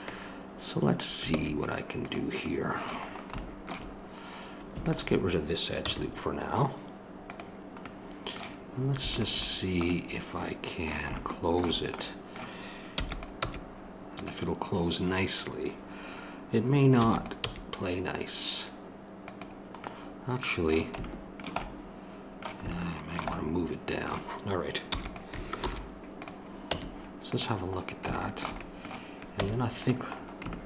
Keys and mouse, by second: 1.3 ctrl+Tab, 4.8-5.8 drag, 5.8 x, 7.8-9.1 middle drag, 9.1-10.7 drag, 10.7-12.9 middle drag, 12.9 e, 16.9 e, 20.1 click, 20.1-21.6 middle drag, 22.0 middle click, 23.0-24.8 middle drag, 24.8 e, 25.6 alt+m, 26.7 Tab, 29.3 Tab.